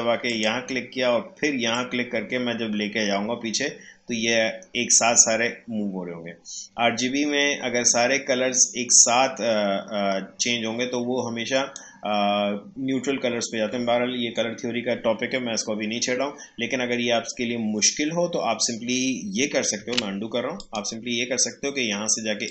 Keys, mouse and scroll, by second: 19.7 ctrl+z, 20.5-22.5 drag.